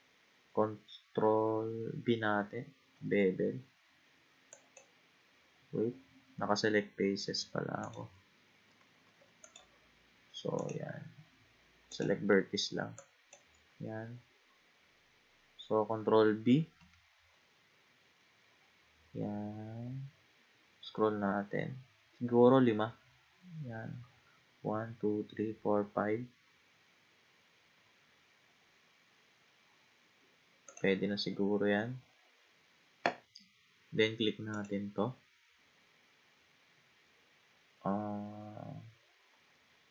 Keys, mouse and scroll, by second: 2.9 ctrl+b, 4.5 click, 7.8 click, 8.7 ctrl+z, 9.1 ctrl+z, 9.4 click, 10.6 click, 11.9 click, 13.0 click, 16.8 ctrl+b, 31.1-33.7 scroll down 1, 34.5 click.